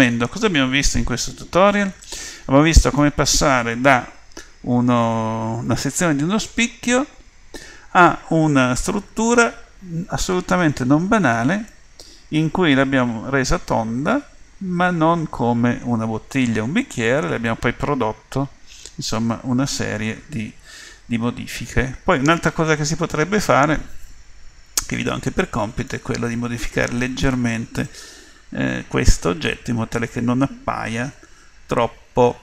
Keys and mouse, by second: 0.7-2.3 middle drag, 10.2 middle click, 19.3-21.0 middle drag, 23.5 middle click, 25.0 middle click, 28.0-29.8 middle drag, 30.5 middle click.